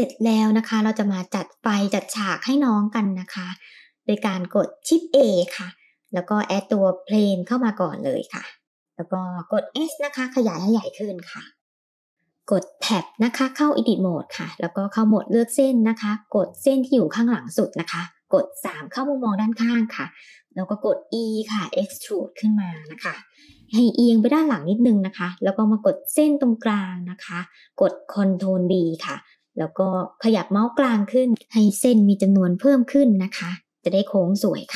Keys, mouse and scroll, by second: 0.7 click, 0.7 middle click, 0.7 shift+a, 1.7-2.5 middle drag, 5.2 shift+a, 9.7 s, 11.5 middle click, 11.6 scroll down 2, 12.9 Tab, 12.9-13.7 scroll down 1, 14.7 click, 17.6 KP_3, 19.1 shift+middle click, 20.4 e, 24.3 middle click, 25.5 click, 28.2 ctrl+b, 33.8 middle click.